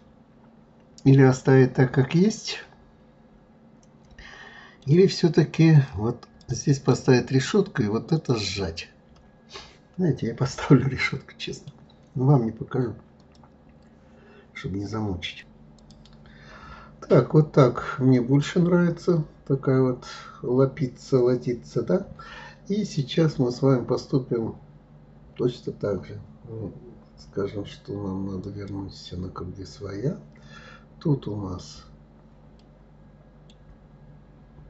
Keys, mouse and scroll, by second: 5.7 click, 6.4 right click, 8.1 right click, 9.1-12.1 middle drag, 17.1-17.8 scroll up 1, 17.8-20.8 middle drag, 28.1-29.2 drag, 32.2-33.6 middle drag, 33.6 scroll down 2.